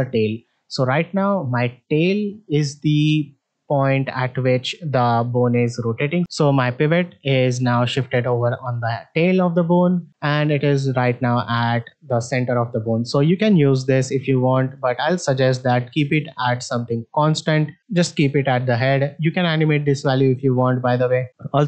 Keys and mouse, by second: 1.1-1.5 middle drag, 3.4 middle drag, 5.4-6.1 middle drag, 9.4 middle drag, 10.5-11.7 drag, 12.3 middle drag, 13.4 click, 14.7 middle click, 19.2-20.6 drag.